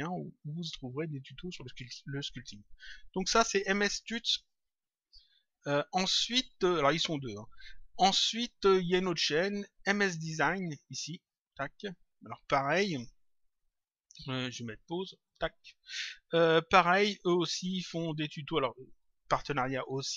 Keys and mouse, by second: 10.5 click, 11.8 click, 15.2 click.